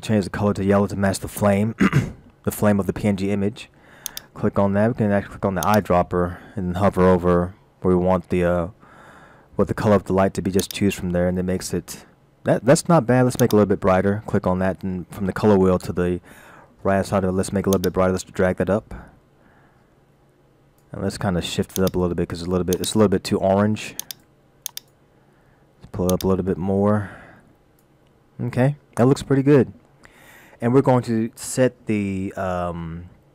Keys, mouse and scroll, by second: 4.0 click, 13.4 click.